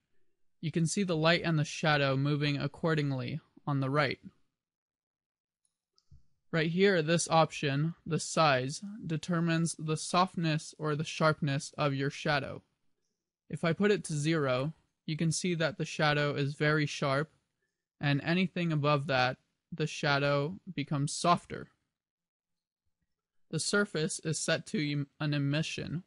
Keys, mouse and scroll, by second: 5.5 click, 13.3 click, 18.8 click.